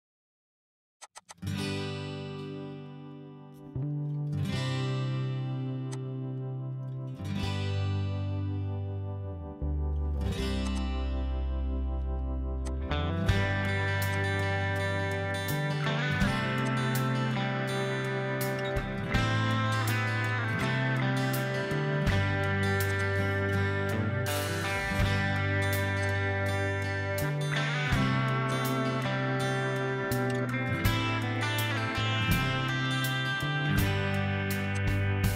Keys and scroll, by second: 0.0-0.7 typing, 2.1 ctrl+g, 2.7 typing, 4.0 h, 13.8 m, 15.1-16.3 typing, 17.4-18.2 typing, 18.9 Escape, 19.2 typing, 19.5 ctrl+a, 21.5 ctrl+h, 26.7 m, 31.6-32.6 typing, 34.0 ctrl+z, 34.3 m.